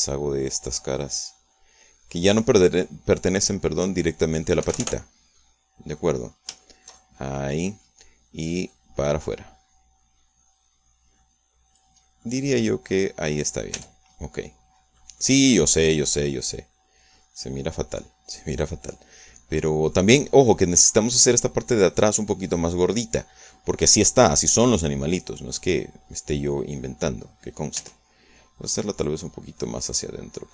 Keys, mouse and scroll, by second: 0.5-5.6 middle drag, 5.6 Escape, 6.0-6.3 scroll down 1, 6.3 middle click, 7.6-8.9 shift+middle drag, 9.6-12.9 drag, 13.2-14.4 middle drag, 14.7 Tab, 15.1-16.1 middle drag, 16.2-22.0 middle drag, 23.5-24.6 middle drag, 25.5-27.5 middle drag, 28.3 scroll up 1, 28.8 Tab, 30.0-30.5 drag.